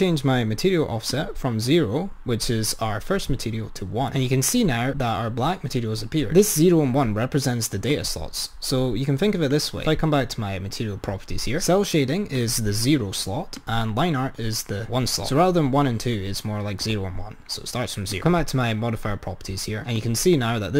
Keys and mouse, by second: 7.9 click, 9.6-11.4 drag, 12.4 click, 13.6 click, 18.3 click, 19.7-20.7 drag.